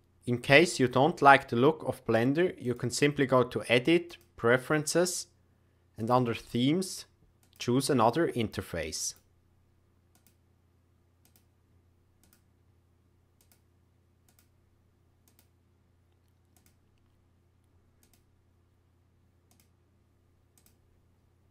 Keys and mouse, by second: 2.8-4.1 drag.